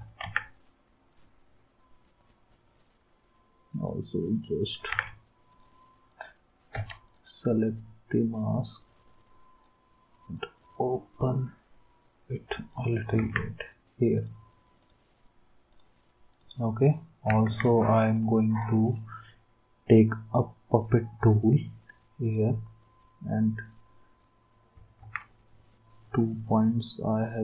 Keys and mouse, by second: 0.2 ctrl+z, 4.9 ctrl+z, 6.7 v, 13.2 ctrl+s, 17.5 ctrl+s, 25.0 ctrl+s.